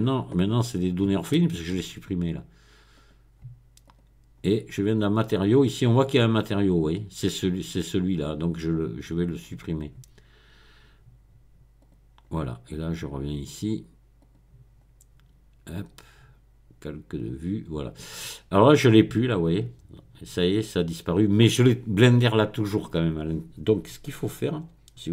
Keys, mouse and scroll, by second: 0.0 right click, 3.0 click, 3.9 click, 5.2 click, 6.2-8.1 drag, 8.1 middle click, 11.8 click, 14.2 click, 17.2 click, 18.7 click, 20.6 click.